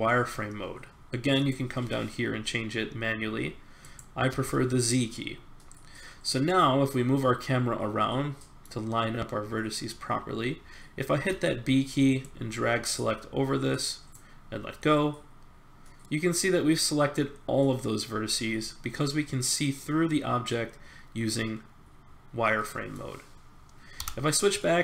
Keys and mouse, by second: 4.3 z, 5.1 middle click, 6.2-7.3 middle drag, 11.1 b, 16.0 click, 16.1-17.9 middle drag, 19.0 middle click, 23.9 z.